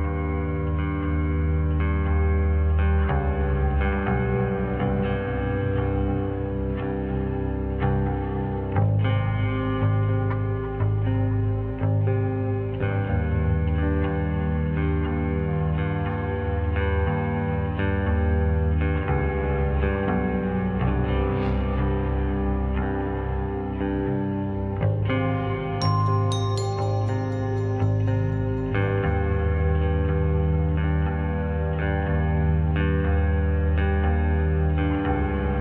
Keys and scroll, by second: 3.2 n, 17.8 0, 21.6 ctrl+d, 25.6 s, 27.2 9, 27.9 Return, 30.2 Right, 31.2 ., 31.9 5, 32.2 Return, 33.4-34.5 typing, 34.7 Return.